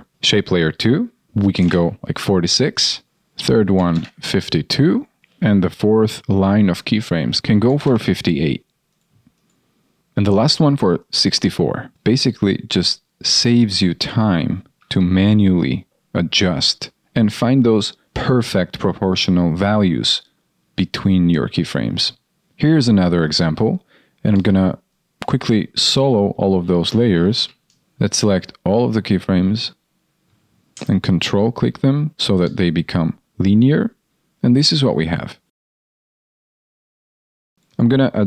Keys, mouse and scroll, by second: 33.7 ctrl+click.